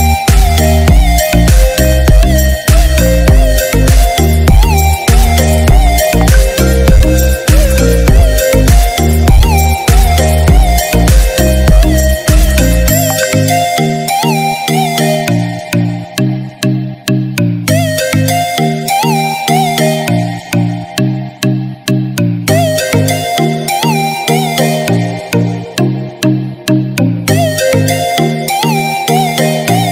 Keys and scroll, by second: 6.2 ctrl+0.